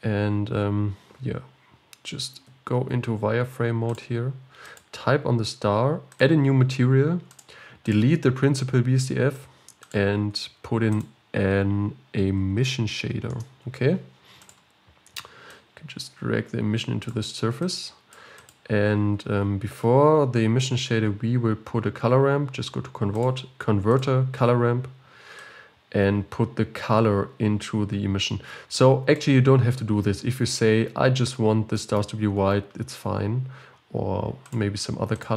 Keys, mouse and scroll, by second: 0.9 scroll up 1, 3.4 z, 4.9 click, 6.3-7.4 drag, 8.0 click, 9.5 x, 9.9-13.3 drag, 17.4-29.5 drag, 35.3 click.